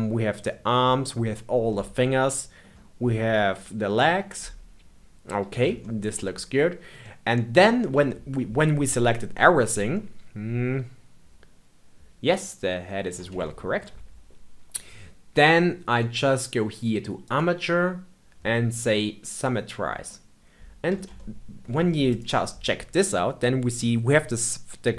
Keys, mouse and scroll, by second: 2.9-4.2 scroll up 1, 4.2-12.9 middle drag, 13.4-16.4 shift+middle drag, 17.2-20.0 drag, 20.0-22.0 middle drag, 22.0 click.